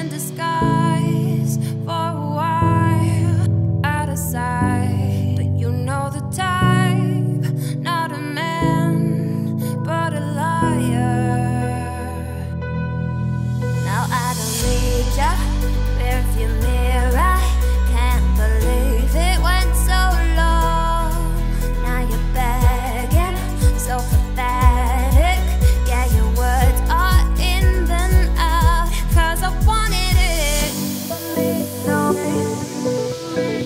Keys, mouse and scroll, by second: 0.4 shift+d, 1.7 p, 2.3 Tab, 2.7 click, 3.4 click, 3.9 Tab, 4.3 a, 5.0 1, 5.4 z, 5.9 shift+middle click, 6.2-7.8 scroll up 2, 7.9 g, 10.1 e, 11.9-12.4 scroll up 1, 12.4 click, 12.8 g, 14.1 a, 14.4 g, 16.6 z, 16.8 scroll down 1, 17.0 middle click, 17.3 scroll up 1, 17.6 e, 18.8 a, 19.1 `, 19.9 z, 20.3-21.1 scroll up 4, 20.3 shift+middle click, 21.1 `, 22.2 shift+n, 22.6-23.1 scroll up 3, 23.1 g, 24.7 z, 24.9 scroll down 3, 25.1 middle click, 25.6 `, 26.2 z, 27.3 shift+d, 31.0 scroll down 5, 31.2 z, 31.6 middle click, 32.0 scroll up 3, 32.1 Tab, 32.6 shift+click, 33.5 ctrl+KP_Subtract.